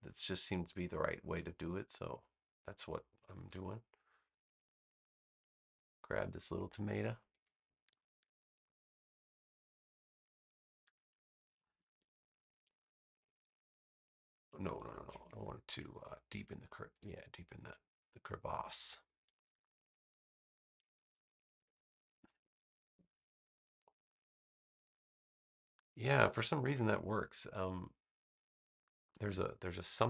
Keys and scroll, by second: 3.4 v, 12.1 a, 14.8 super+z, 21.5 BackSpace, 22.8 super+-, 26.5 v.